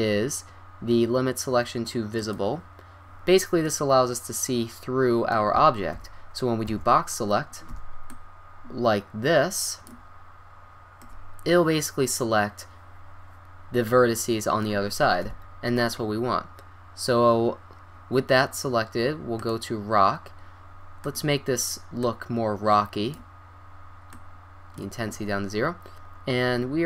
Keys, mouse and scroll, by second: 2.2-3.3 drag, 3.2 middle click, 3.7 middle click, 4.1-5.5 middle drag, 5.9 KP_1, 6.7 a, 7.7 b, 11.6-12.9 middle drag, 15.3 KP_1, 16.4 middle click, 19.5-23.0 drag, 24.2-25.8 drag, 26.3 middle click.